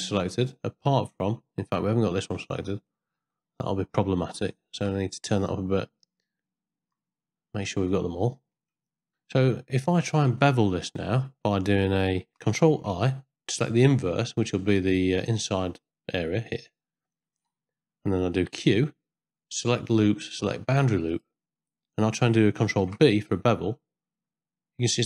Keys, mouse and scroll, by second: 1.8-2.2 ctrl+scroll up 1, 2.2 ctrl+middle click, 2.9 ctrl+scroll up 1, 2.9 ctrl+middle click, 3.3 middle click, 5.1-6.9 shift+drag, 7.9 scroll up 1, 8.1 middle click, 9.1-10.1 ctrl+middle drag, 10.6 scroll up 1, 10.7 middle click, 12.9 ctrl+i, 14.7 middle click, 16.7 middle click, 18.5 q, 22.8 ctrl+b.